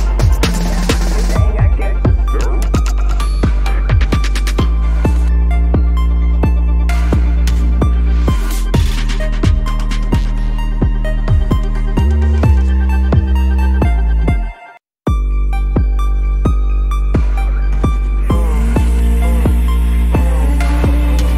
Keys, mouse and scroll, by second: 0.6 ctrl+s, 3.2 ctrl+-, 3.4 ctrl+-, 4.6 ctrl+-, 4.9 ctrl+-, 5.2 space, 5.8 space, 6.0 ctrl+`, 6.2 ctrl+`, 8.8 double click, 9.1-10.9 typing, 15.3 double click, 15.8-16.6 typing, 18.7 double click, 19.3 ctrl+c, 19.8 double click, 20.4 typing, 20.9 double click.